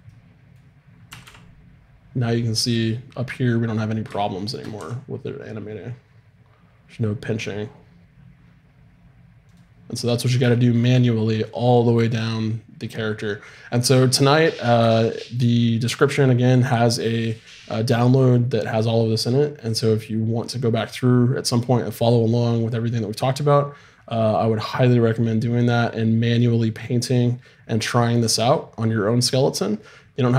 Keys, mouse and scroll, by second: 0.5 click, 1.1 r, 2.4 middle click, 4.2-6.3 middle drag, 4.8 r.